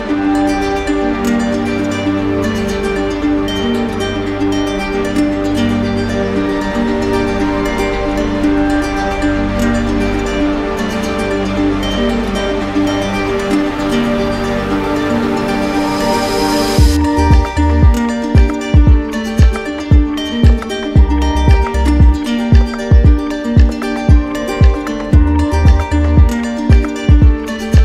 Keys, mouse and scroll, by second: 0.6-1.7 drag, 7.0 click, 7.2 shift+click, 7.9 click, 8.3 click, 12.8 alt+click, 13.1 alt+click, 14.9 z, 15.7 click, 21.2 click, 21.9 click, 22.5 click, 23.3 click, 24.5 click, 25.1 click, 26.2 click, 26.9 click.